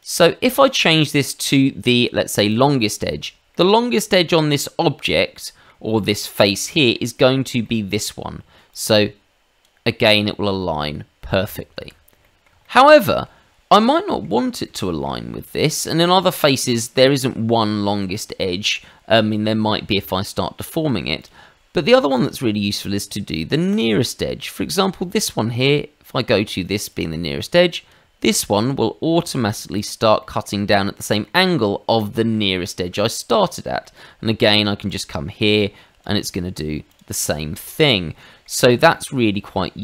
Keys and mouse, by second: 2.5 click, 3.5 middle click, 4.1 shift+middle click, 4.5 middle click, 6.6 middle click, 7.6 middle click, 8.7 click, 11.7 Escape, 12.2 middle click, 12.6 shift+middle click, 12.9 shift+middle click, 13.9 middle click, 14.6 middle click, 15.6 middle click, 16.5 shift+middle click, 21.2 click, 22.1 click, 23.7 click, 26.9 click, 29.7 click, 30.2 shift+middle click, 31.0 middle click, 32.0 middle click, 32.5 shift+middle click, 33.4 shift+middle click, 33.8 middle click, 34.9 click, 36.9 click, 37.5 middle click, 38.1 shift+middle click, 39.1 middle click.